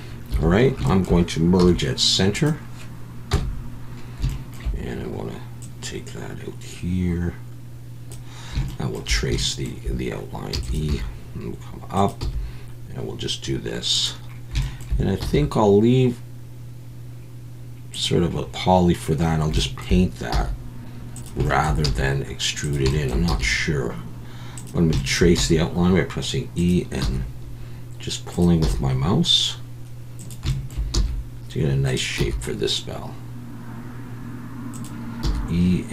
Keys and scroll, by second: 0.3 1, 1.6 m, 4.2 m, 5.6 KP_1, 10.5 e, 10.9 g, 12.2 e, 20.3 e, 21.8 e, 23.3 e, 25.3 e, 27.0 e, 28.6 e, 30.9 e, 32.2 e.